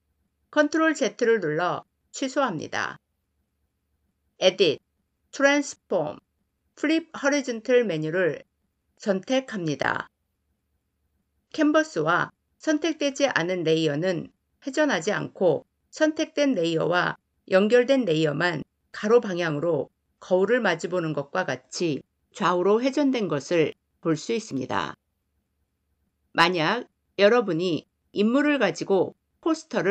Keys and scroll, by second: 0.3 ctrl+z.